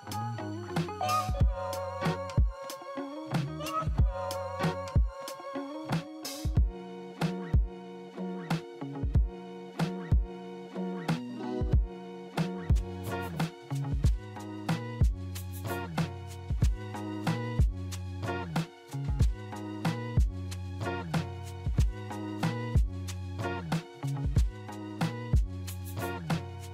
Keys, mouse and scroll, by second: 13.1 3, 14.2 F3, 18.2 2, 19.4 F3, 21.0 right click.